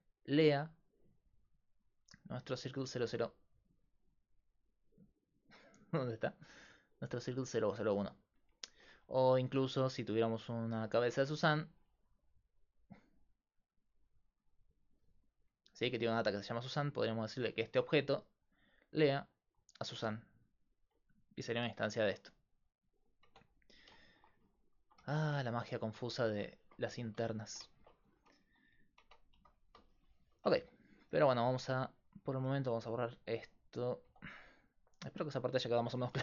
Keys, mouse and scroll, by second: 4.0-5.7 right drag, 9.1 click, 9.2 shift+a, 14.4 g, 17.0-19.7 right drag, 18.0-19.9 drag, 21.8 right click, 22.1 Tab, 22.6-24.1 right drag, 23.3 Tab, 24.1 click, 24.2 right click, 25.0 x, 26.9 z, 28.2 a, 28.5 a, 29.0 Tab, 29.4 a, 29.9 click, 30.6 x, 32.5 x, 34.1 x, 36.0 Tab.